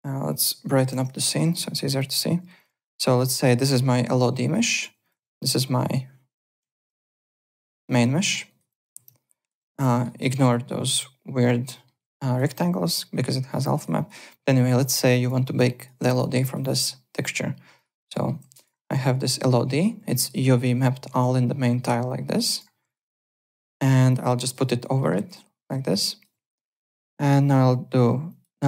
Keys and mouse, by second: 0.2 click, 0.8 KP_2, 0.9 Return, 1.5 alt+click, 1.7 alt+right click, 2.0 alt+click, 2.3 `, 2.5 click, 2.8 alt+click, 3.1 alt+middle click, 4.5 alt+middle click, 4.7 alt+click, 5.0 click, 5.1 z, 5.3 alt+click, 5.7 `, 5.8 click, 6.6 7, 7.0 alt+right click, 7.4 click, 7.7 alt+middle click, 7.9 alt+right click, 8.1 alt+click, 8.4 alt+right click, 8.7 alt+click, 8.8 `, 9.2 alt+click, 9.6 `, 9.7 click, 9.9 alt+middle click, 10.0 alt+right click, 11.7 alt+middle click, 12.2 alt+right click, 12.4 alt+middle click, 12.7 alt+click, 13.5 alt+click, 13.7 alt+right click, 13.9 alt+click, 14.6 alt+click, 15.0 `, 15.2 click, 15.4 alt+right click, 15.7 alt+click, 16.0 `, 16.1 click, 16.1 click, 16.3 alt+right click, 17.7 click, 18.1 alt+middle click, 20.9 alt+middle click, 22.4 ctrl+e, 22.6 ~, 22.8 click, 23.1 alt+middle click, 23.4 click, 23.7 x, 24.1 click, 24.5 x, 25.0 alt+middle click, 25.1 alt+right click, 25.3 alt+click, 28.2 click.